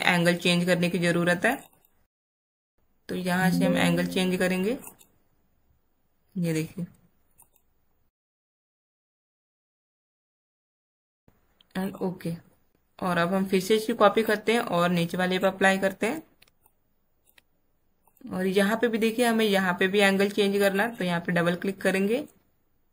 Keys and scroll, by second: 16.3 space.